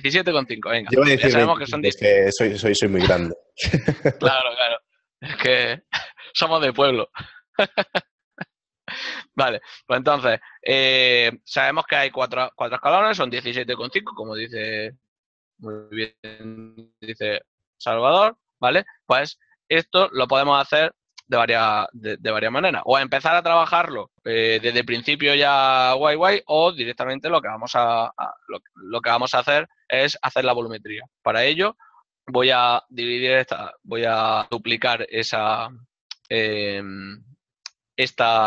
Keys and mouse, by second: 33.0 right click, 33.2 g, 36.9 ctrl+middle click.